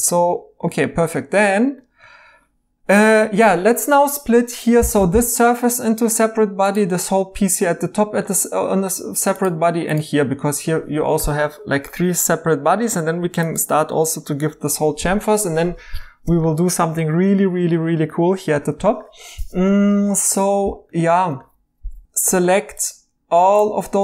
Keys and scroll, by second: 3.2 Tab, 4.3 3.